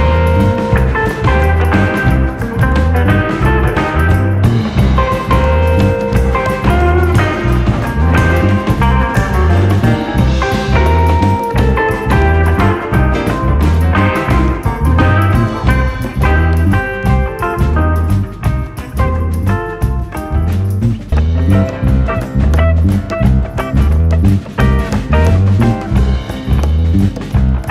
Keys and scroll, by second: 3.2-4.4 scroll, 15.6 BackSpace, 15.6 4, 15.8 Down, 15.9 Down, 16.1 —, 22.0 p, 22.4-25.2 p, 24.8 scroll, 27.6 ctrl+v.